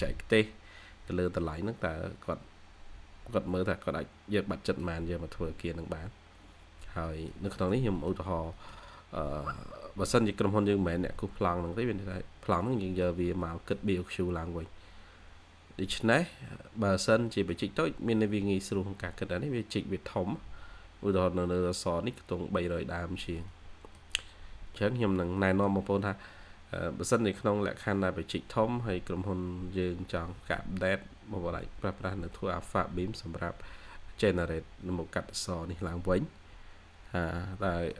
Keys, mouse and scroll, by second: 4.2 scroll down 1, 4.4 middle click, 4.6 scroll up 1, 4.8-5.9 scroll down 1, 6.4-7.0 scroll up 1, 7.0 middle click, 8.0-8.4 scroll down 1, 8.4 middle click, 8.8 scroll up 1, 11.8 scroll down 1, 12.6 middle click, 12.7-13.1 scroll up 1, 13.1 scroll down 1, 13.4 middle click, 14.0 scroll down 1, 14.4 scroll up 1, 17.2 middle click, 17.3-18.1 scroll down 1, 18.1-18.5 scroll up 1, 21.7-22.8 scroll down 1, 22.8-23.4 scroll up 1, 23.4 middle click, 25.3 middle click, 26.1-27.2 scroll up 1, 30.1 middle click, 30.3 scroll up 1, 31.5-32.7 scroll down 1, 36.6-37.6 scroll up 1, 37.6 middle click.